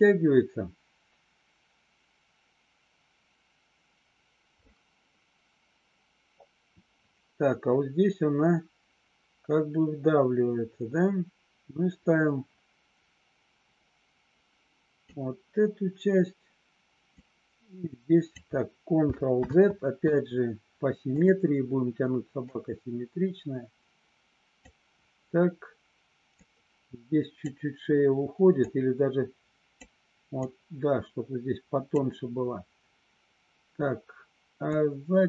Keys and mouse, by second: 17.1-18.3 drag, 19.4 ctrl+z, 21.0 click, 22.5-24.5 drag, 26.4 click, 28.7-29.8 drag, 30.7-31.9 drag, 34.8 click.